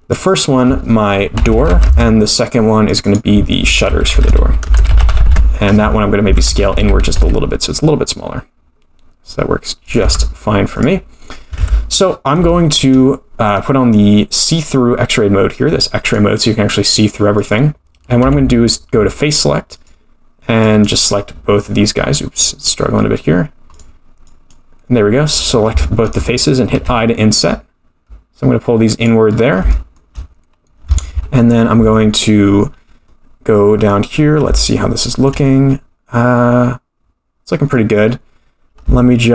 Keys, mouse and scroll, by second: 0.1 click, 0.2-3.0 drag, 1.6 o, 3.4-5.8 drag, 4.2 u, 4.9 t, 6.3 Tab, 6.5 s, 10.0 Tab, 10.7 click, 11.6 Tab, 12.1-12.4 scroll up 3, 12.5 shift+middle click, 13.5-13.8 scroll down 4, 16.0 click, 17.3 click, 18.2 3, 19.8 click, 20.6 click, 21.6-22.0 scroll down 3, 22.4 click, 23.7 click, 24.2 click, 26.8 i, 29.3-29.7 scroll up 3, 29.7 shift+middle click, 33.0 middle click, 34.2-34.5 scroll up 2, 34.5 shift+middle click, 38.0-38.8 scroll down 1, 38.8 shift+middle click.